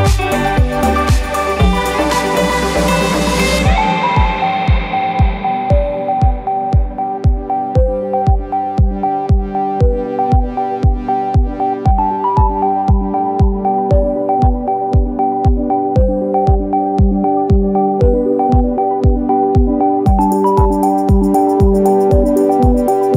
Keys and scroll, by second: 19.6 f.